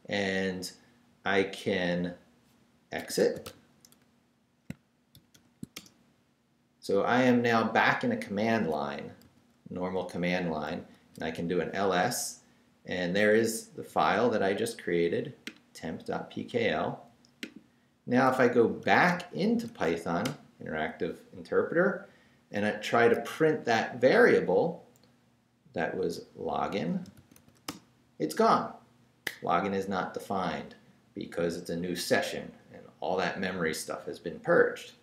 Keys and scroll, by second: 2.8-5.8 typing, 6.7 Return, 9.2-11.4 typing, 18.6-20.2 typing, 20.2 Return, 26.5-27.8 typing.